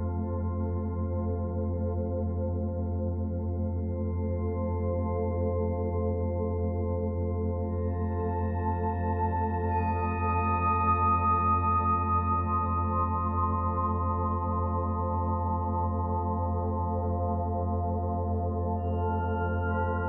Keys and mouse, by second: 0.3-2.9 drag, 2.3-2.9 typing, 4.2 typing, 4.6-8.6 drag, 8.6 Delete, 9.1-12.0 drag, 12.0-13.3 typing, 12.8-14.3 drag, 14.8 alt+click, 15.5 ctrl+alt+drag, 16.6 typing, 17.7 click, 18.4-19.2 drag, 19.6-20.0 typing.